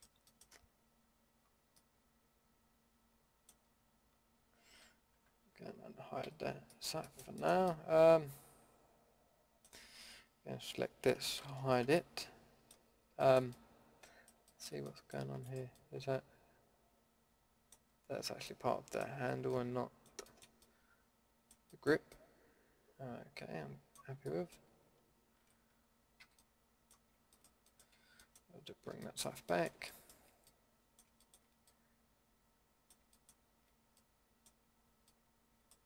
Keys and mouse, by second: 0.6-1.4 middle drag, 1.7 middle click, 3.6-5.3 middle drag, 5.3 alt+h, 6.2 a, 10.6 l, 11.8 h, 15.4-18.5 middle drag, 19.2 a, 20.0-20.4 middle drag, 20.8-21.4 middle drag, 21.7 middle drag, 22.3-23.7 middle drag, 23.9-25.4 middle drag, 25.4 alt+h, 26.2 a, 33.1-34.0 middle drag, 34.7 middle click.